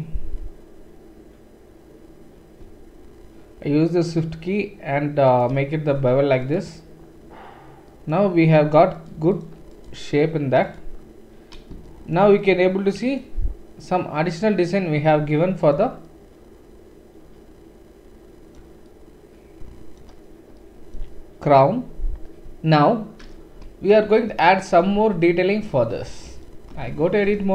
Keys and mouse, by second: 5.9 Tab, 6.0-9.0 middle drag, 6.0 typing, 9.0 click, 9.0 typing, 9.0 middle click, 9.3-10.7 drag, 10.7 middle click, 10.7-27.5 right drag, 24.2-24.8 shift+middle drag, 24.8 click, 26.7 Tab.